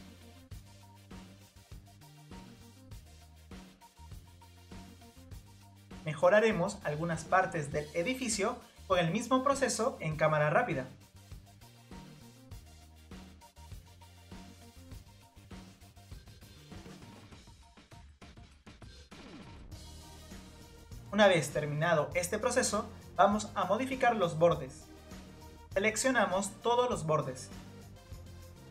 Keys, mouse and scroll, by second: 0.6 click, 0.8 Tab, 1.5 click, 2.3 click, 3.3 click, 4.3 click, 4.4 scroll down 1, 4.5 middle click, 4.9 Tab, 5.1 click, 6.7-9.2 drag, 9.2 scroll down 2, 9.6 scroll up 1, 10.4 click, 12.2 click, 12.5 click, 12.6 shift+click, 12.6-13.2 scroll down 5, 12.7 shift+click, 13.2 scroll up 2, 13.4 click, 14.5 click, 14.7 Tab, 15.0 scroll up 1, 15.1 click, 15.4 scroll down 2, 15.7 click, 16.7 click, 16.8 scroll up 2, 17.4 click, 17.6 scroll down 2, 17.8-18.2 scroll up 1, 18.6 click, 18.8 click, 19.2 click, 19.3 scroll down 2, 19.4 middle click, 19.7 middle drag, 19.9 scroll up 2, 20.0 middle click, 20.3 click, 20.3 scroll down 1, 20.4 Tab, 20.4 click, 20.6 scroll up 1, 20.7-23.7 middle drag, 23.7 click, 25.3 click, 26.0 middle click, 26.9-27.9 scroll down 2, 27.9-28.7 middle drag.